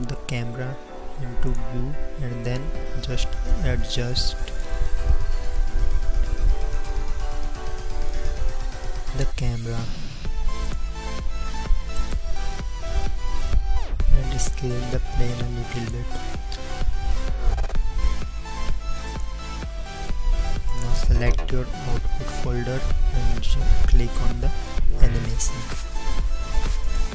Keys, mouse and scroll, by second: 1.6-3.6 drag, 2.0 n, 4.0 click, 9.6 n, 10.6 click, 11.0 n, 13.6 s.